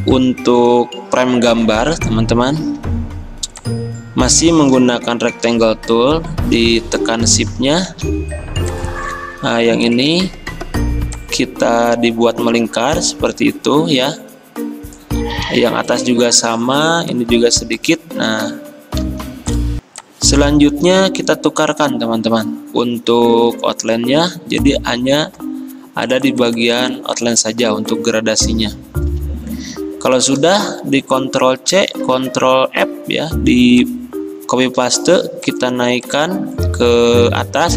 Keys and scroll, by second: 8.0 a, 15.5 a, 19.1 v, 21.3 x, 31.7 ctrl+c, 32.3 ctrl+f.